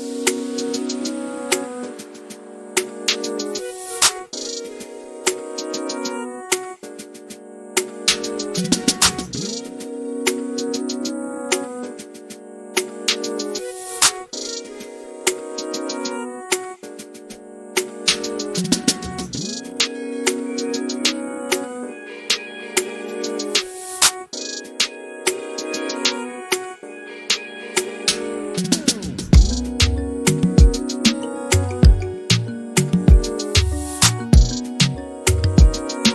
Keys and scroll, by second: 2.1 q, 4.0 Delete, 6.9 m, 7.9 q, 9.5-11.0 typing, 14.6-17.0 typing, 21.9-23.8 typing, 27.5 m, 32.0-33.1 typing, 34.3 Delete, 34.8-35.5 typing.